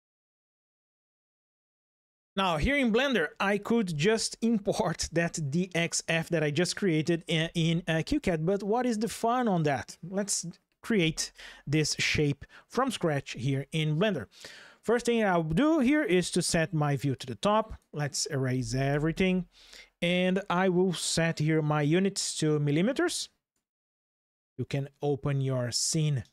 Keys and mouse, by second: 15.8 KP_7, 16.9-17.5 drag, 18.6 Delete, 22.7 click, 25.9 ctrl+shift+\.